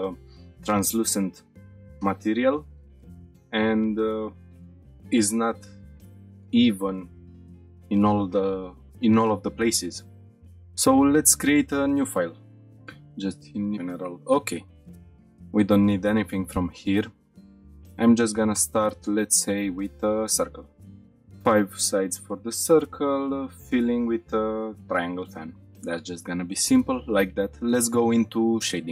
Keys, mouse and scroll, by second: 11.8 click, 14.9 middle click, 15.0 scroll down 1, 15.1-15.5 drag, 16.5 Delete, 17.2-17.6 scroll up 2, 17.4 shift+a, 20.9-22.3 shift+drag, 22.6-24.7 drag, 25.5-26.0 scroll up 3, 26.3-26.6 shift+middle drag, 26.7 middle click.